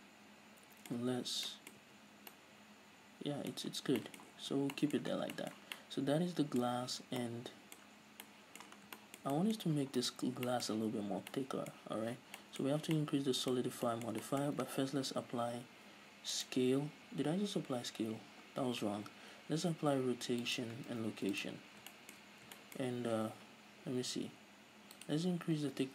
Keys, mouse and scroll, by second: 1.2 Tab, 2.1 Tab, 4.0 scroll down 1, 4.7 a, 5.4 scroll down 2, 6.9-7.5 scroll up 2, 8.3 scroll down 2, 9.0 scroll down 2, 9.9-10.2 scroll up 2, 10.2-10.6 right drag, 10.7 shift+middle drag, 11.2 z, 11.3 scroll up 2, 11.6-15.1 middle drag, 12.3 z, 12.9 scroll up 2, 14.0 scroll down 2, 15.1 ctrl+a, 19.2 ctrl+a, 20.2-25.3 middle drag, 22.0 scroll down 2, 22.5-22.8 scroll up 2, 25.3-25.9 drag.